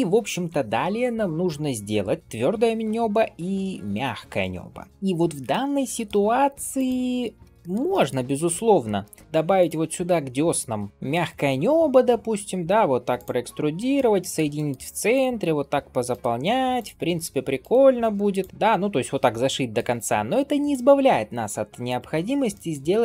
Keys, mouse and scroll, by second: 4.9-5.3 middle drag, 5.7 shift+middle drag, 6.2 scroll up 1, 6.6 click, 7.1 scroll down 1, 7.5 shift+middle click, 7.8 middle drag, 8.1 scroll up 2, 8.4 Tab, 8.9 shift+middle click, 9.2 1, 9.4 click, 9.9-11.0 middle drag, 12.0 e, 13.6 middle click, 14.0 shift+middle click, 14.4 middle click, 15.0 click, 15.5 f, 16.6 click, 17.1 f, 18.2 click, 18.5 shift+middle click, 19.2 scroll down 1, 19.4 middle click, 20.2 click, 21.0 x, 22.4 shift+middle click.